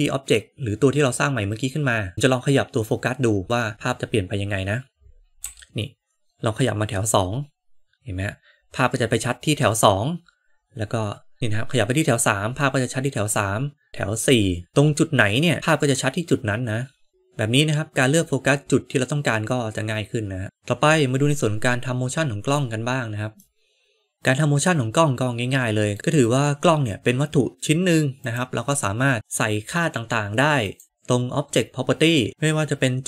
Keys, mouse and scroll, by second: 5.4 g, 20.4-22.6 middle drag, 20.4 n, 20.4 KP_0, 23.4-26.4 middle drag, 28.1 click, 30.5 click.